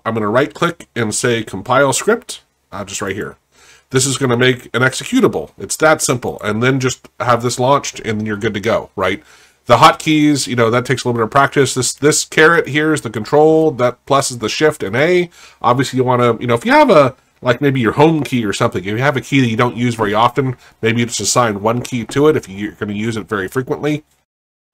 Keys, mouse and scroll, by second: 3.1 click, 6.3 click, 10.1 click, 12.6 click, 13.6 click.